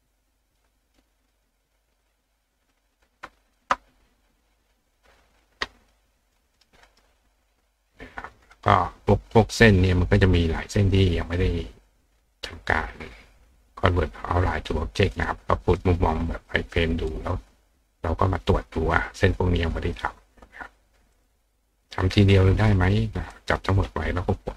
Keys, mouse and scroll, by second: 0.9 click, 1.2 click, 2.1 click, 3.5 shift+click, 4.9 click, 5.3 click, 6.3 click, 6.6 right click, 6.9 right click, 7.9 click, 15.1 click, 15.8 click, 19.4 click, 21.2 click, 21.9 click, 22.3-23.3 drag.